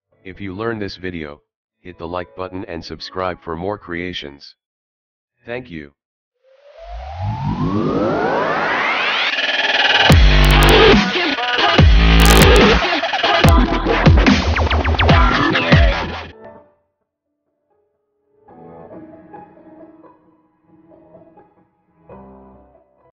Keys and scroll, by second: 0.0-1.1 typing, 1.3 Escape, 4.7 o.